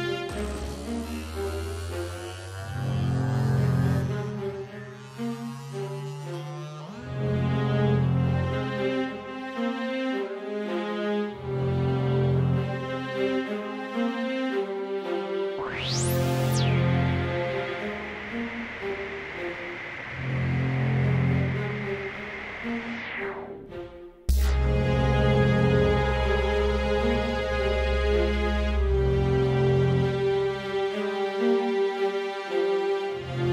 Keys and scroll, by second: 0.1 Page_Up, 0.1 Page_Up, 0.2 Page_Up, 0.3 Page_Up, 0.3 Page_Up, 2.7-3.6 typing, 8.9 super+d, 10.2 super+d, 10.3 super+d, 10.4 super+d, 19.1 Page_Up, 19.2 Page_Up, 19.4 Page_Up, 19.6 Page_Up, 19.7 Page_Up, 20.3 super+Down, 20.4 super+Down, 20.6 super+Down, 21.3 super+Page_Down.